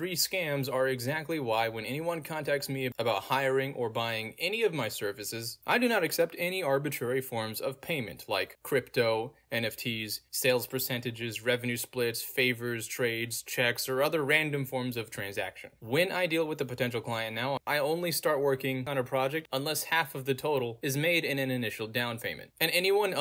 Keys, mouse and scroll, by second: 0.5 click, 1.7 click, 2.2 click, 2.7 middle click, 2.7-3.4 scroll down 2, 3.8-6.7 drag, 6.9 click, 7.7-17.9 drag, 19.1-23.2 drag.